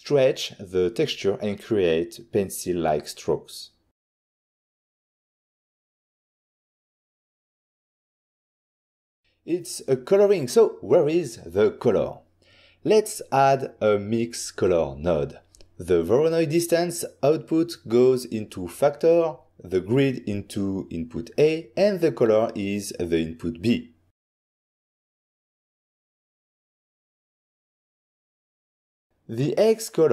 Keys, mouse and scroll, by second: 1.4 click, 2.7 typing, 3.9 Return, 6.3 click, 7.2-7.5 typing, 8.1 Return, 9.3 ctrl+middle click, 10.0 click, 10.3 click, 11.5 click, 11.6-13.0 typing, 11.7 click, 13.4 Return, 15.2 click, 16.3 ctrl+middle click, 18.5 click, 20.5 click, 20.9 middle click, 21.8 middle click, 21.8 scroll down 1, 22.6 click, 22.9 click, 23.1 click, 23.7 click, 24.4 click, 25.3 click, 27.2 click, 27.7 click, 28.4 click, 29.2 ctrl+shift+click.